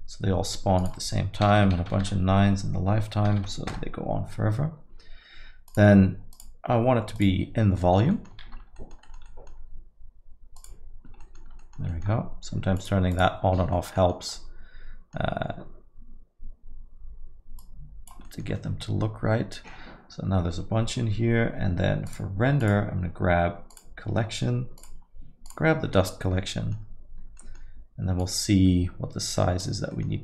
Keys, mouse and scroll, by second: 8.8 middle click, 9.2 middle click, 11.2 middle click, 11.9 middle click, 13.7 middle click, 14.1 scroll down 1, 14.3 middle click, 18.2 middle click, 18.5 middle click, 26.4 scroll, 26.5 middle click, 27.2 scroll, 27.4 middle click, 28.2-28.9 scroll, 29.9 middle click.